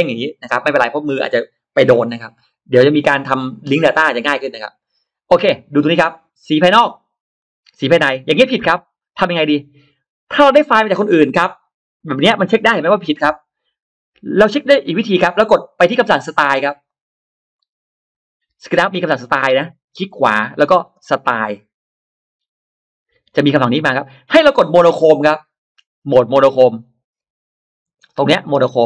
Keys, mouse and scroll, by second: 6.5 click, 7.6 click, 9.1 click, 14.1 click, 16.7 click, 19.0 click, 20.0 right click, 23.2 click, 24.1-24.9 drag, 27.8 ctrl+alt+middle click.